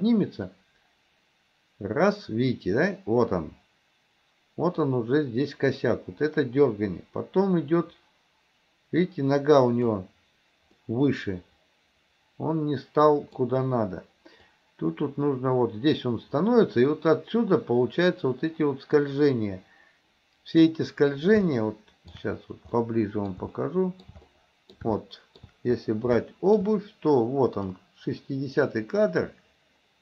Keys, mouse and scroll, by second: 0.6-10.0 drag, 10.8-13.4 middle drag, 14.5-20.8 drag, 21.5-22.2 shift+middle drag, 22.8-23.4 middle drag, 23.6-24.1 shift+middle drag, 24.3-24.8 middle drag, 25.1-25.5 shift+middle drag, 26.2-26.7 shift+middle drag, 27.8-30.0 drag.